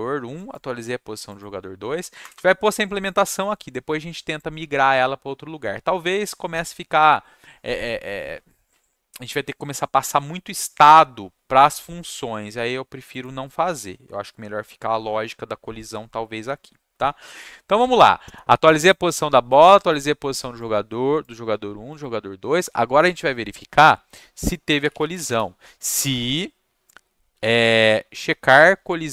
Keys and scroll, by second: 2.2 Return, 2.3 Return, 24.5-25.6 typing, 27.1-28.3 typing, 29.0 Return.